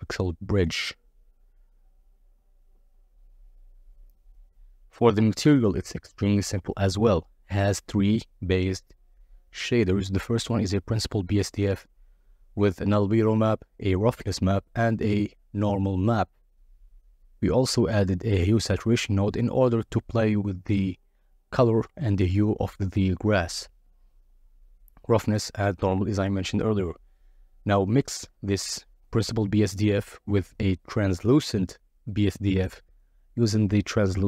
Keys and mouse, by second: 1.8-3.8 drag, 4.0 click, 5.4 click, 6.5 click, 7.2 click, 9.9 click, 17.5 middle drag, 18.4 z, 21.6 click, 22.4 click, 23.7 click, 24.5 click, 26.9 click, 27.1 middle click, 27.9-29.1 middle drag, 29.7 middle click, 31.0 ctrl+shift+click, 31.8 middle click, 34.1 ctrl+shift+click.